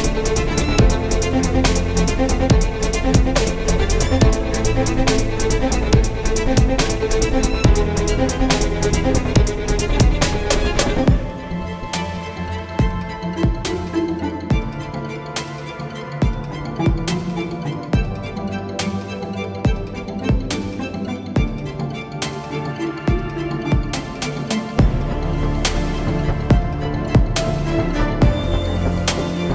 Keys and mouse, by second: 1.9 KP_3, 3.0 ctrl+b, 5.8 Tab, 6.7 r, 9.8-11.7 drag, 12.2 r, 14.3 z, 14.7 Tab, 15.0 z, 15.5 z, 16.1 Tab, 17.3 z, 17.7 z, 18.7 z, 18.9 z, 19.4 z, 19.6 z, 20.8 ctrl+j, 22.4 Tab, 22.8 z, 23.2 ctrl+Tab, 24.5 c, 26.9 shift+d, 27.9 z, 28.9 z, 29.2 z.